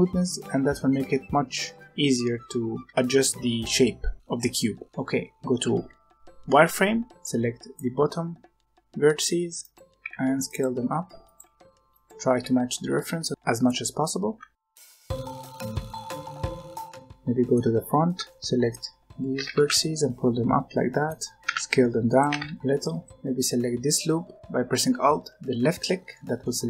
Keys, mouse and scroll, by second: 1.5-2.4 scroll up 1, 2.9-4.7 shift+middle drag, 5.6 z, 7.1 b, 9.1 g, 9.9 s, 10.7 g, 11.4 s, 13.7 alt+a, 14.0 b, 15.0 g, 16.0 s, 16.5 g, 16.7 scroll down 2, 16.8 middle click, 17.7-18.2 scroll up 2, 18.2 shift+middle click, 18.3 b, 19.3 g, 21.3 s, 22.2 g, 23.1 alt+click, 26.0-26.6 middle drag.